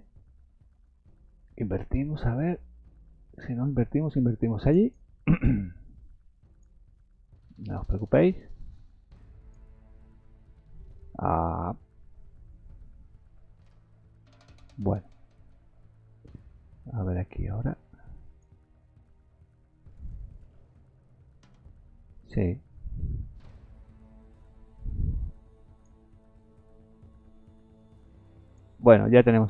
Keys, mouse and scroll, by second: 0.0-0.9 scroll up 4, 2.6 click, 4.9 click, 6.4 click, 8.0 click, 12.2 middle click, 13.3-13.6 scroll up 3, 13.9 middle click, 14.9-15.3 scroll up 1, 17.6 click, 19.6 click, 27.2 click, 29.3 scroll up 2.